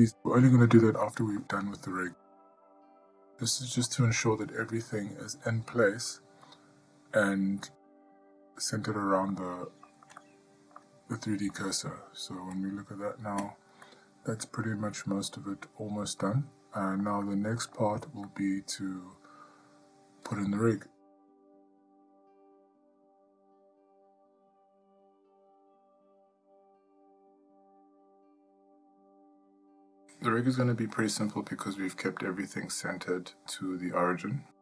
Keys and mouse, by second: 1.7-2.0 shift+middle drag, 2.5-3.0 middle drag, 3.3-3.7 shift+middle drag, 6.3-6.9 middle drag, 9.5-10.1 middle drag, 10.4-11.0 shift+middle drag, 11.4-11.8 middle drag, 12.8 click, 14.1-16.5 middle drag, 17.5-18.0 shift+middle drag, 18.5-19.0 middle drag, 30.9-31.8 middle drag, 32.6-32.9 middle drag, 34.0-34.3 shift+middle drag, 34.5-34.6 middle drag.